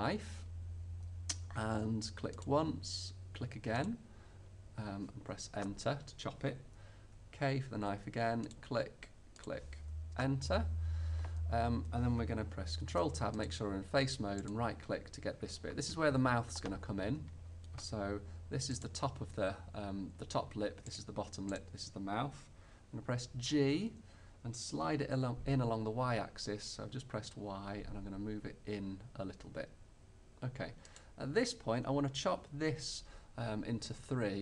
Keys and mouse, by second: 7.1 k, 12.9 ctrl+Tab, 14.5-16.4 drag, 18.7-20.7 drag, 21.0-23.5 right drag, 23.5 g, 31.1-33.0 middle drag.